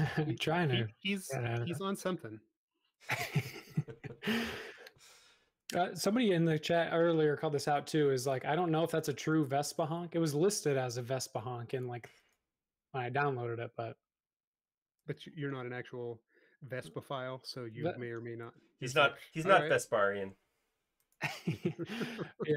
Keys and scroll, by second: 0.8 space, 5.4-7.2 typing, 10.0 l, 18.3 space.